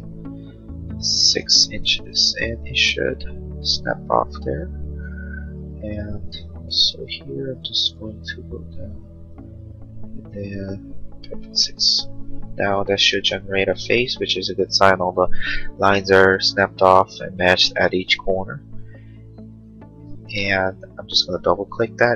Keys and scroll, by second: 1.0 6, 1.4 Return, 6.7 l, 11.4 6, 11.6 Return, 12.9 space.